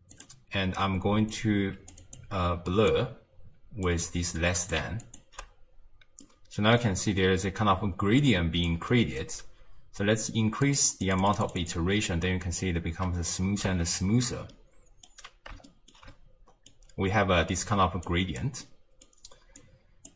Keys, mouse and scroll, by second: 1.3 drag, 2.9 drag, 4.3 click, 5.1 ctrl+shift+click, 5.8 scroll down 2, 6.2-7.0 middle drag, 7.0-7.5 scroll up 1, 7.5-8.1 d, 8.2 click, 8.7 d, 8.9 d, 9.3 d, 10.6-13.6 drag, 13.6 z, 14.5-15.3 middle drag, 15.3-15.7 scroll down 1, 15.7-18.0 shift+middle drag, 18.0 click, 18.6-19.6 middle drag, 19.6 click.